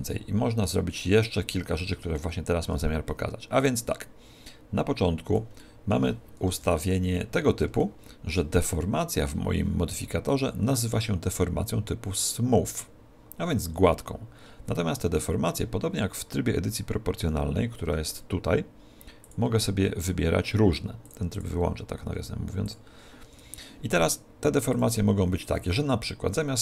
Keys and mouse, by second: 1.2 right click, 1.7 right click, 3.6 click, 5.6-9.6 middle drag, 6.5 KP_1, 10.3 right click, 17.9 Tab, 19.2 click, 21.4 click, 23.3 Tab, 24.8 click.